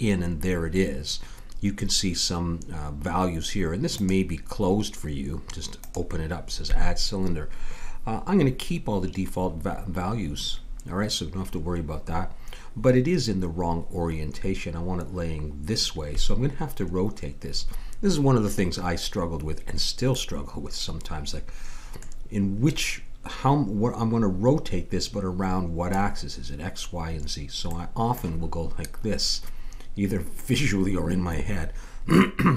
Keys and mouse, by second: 3.9-7.5 drag, 20.1-21.1 middle drag, 27.6-31.8 middle drag.